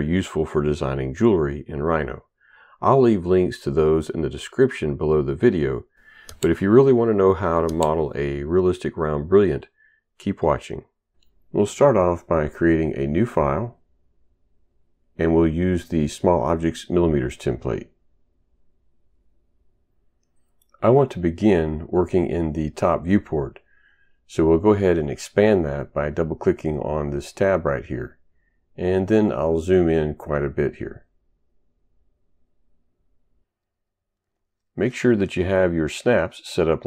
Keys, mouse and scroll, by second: 1.0 click, 2.3 right click, 14.4 click, 16.3 click, 17.9 click, 25.8 click, 26.0 double click, 28.4 ctrl+right click, 30.1 ctrl+right click, 32.3 ctrl+right click.